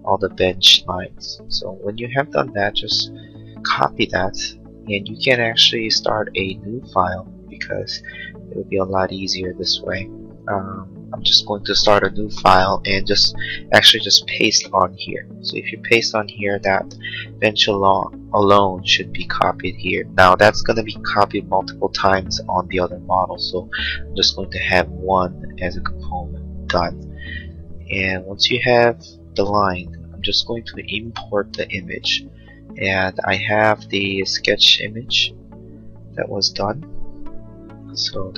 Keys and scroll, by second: 3.6 ctrl+c, 14.7 ctrl+v.